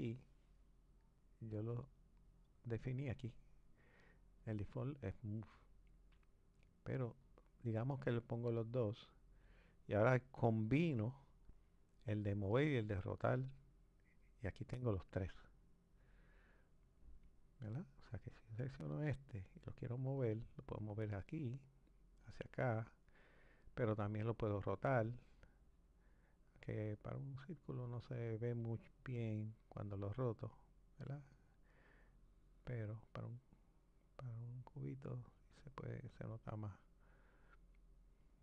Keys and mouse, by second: 1.8-4.9 drag, 18.6 click, 20.4 click, 22.2 click, 24.4 click, 27.3 click, 29.1 click, 30.9 click, 37.2 click.